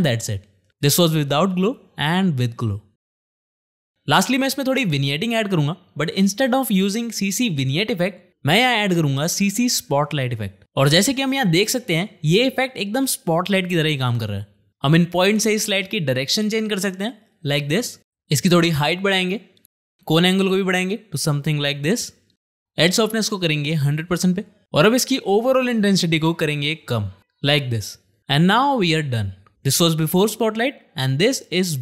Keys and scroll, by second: 7.4 ctrl+space, 7.7-9.0 typing, 9.7 Return.